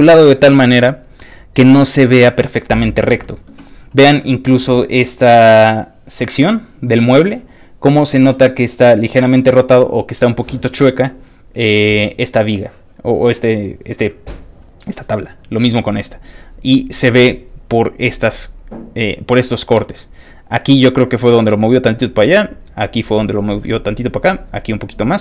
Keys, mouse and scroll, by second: 11.1 middle click, 11.2-11.8 scroll down 1, 11.8 middle click, 11.9-14.5 scroll up 1.